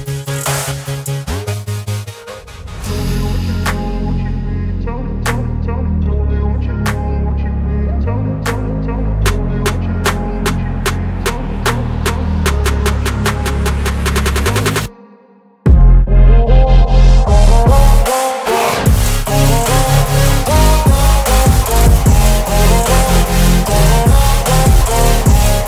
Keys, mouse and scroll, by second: 1.7 shift+click, 4.6 ctrl+g, 5.3 click, 6.4-8.4 typing, 10.4 Return, 10.6 shift+click, 11.7-13.9 shift+click, 19.6 ctrl+c, 20.6 click, 21.2 t, 22.1 click, 24.2 ctrl+v.